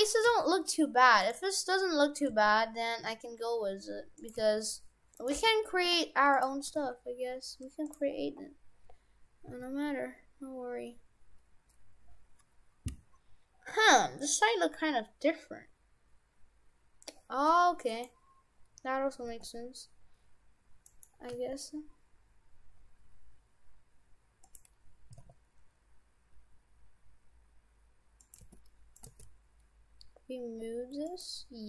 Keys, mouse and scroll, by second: 0.3 g, 1.6-2.1 scroll down 3, 2.3 g, 4.4 g, 5.4 g, 6.7 g, 8.2-9.2 scroll up 2, 9.2-9.5 scroll up 1, 9.5 s, 19.2 g, 21.4 g, 25.2 s, 28.4 g, 29.0 g.